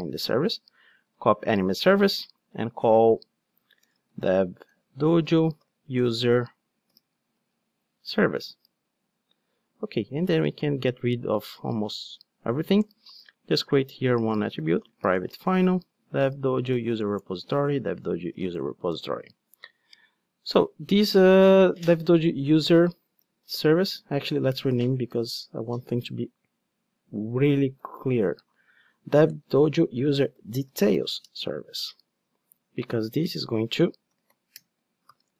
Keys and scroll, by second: 1.1 super+c, 1.9 super+v, 3.8 alt+BackSpace, 17.2 Return, 25.5 shift+F6, 34.6 Return.